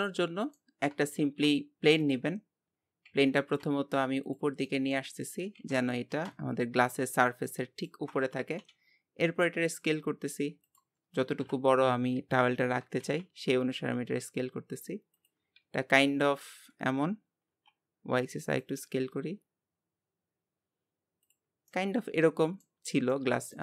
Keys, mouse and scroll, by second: 0.0-1.1 middle drag, 1.1 shift+a, 2.6-3.2 scroll down 2, 3.2 g, 4.7 middle click, 5.2-5.6 scroll up 1, 5.6 g, 11.4 KP_7, 12.2-12.7 scroll up 2, 12.7 s, 15.6 s, 21.7-22.9 middle drag, 22.9 scroll up 2, 23.1-23.6 middle drag.